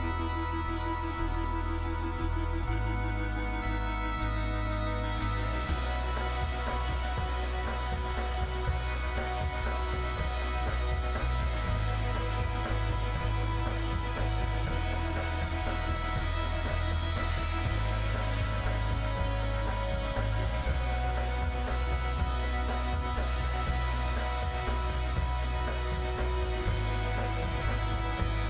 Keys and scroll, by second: 0.0 super+=, 0.8 super+i, 1.3 super+-, 7.6 super+-, 7.9 super+], 16.4 super+=, 22.1 super+-, 22.6 super+=, 23.5 super+j.